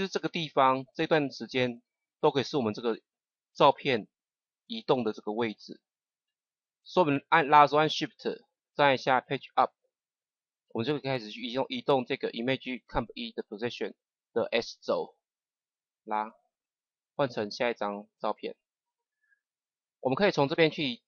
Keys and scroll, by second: 9.5 Page_Up.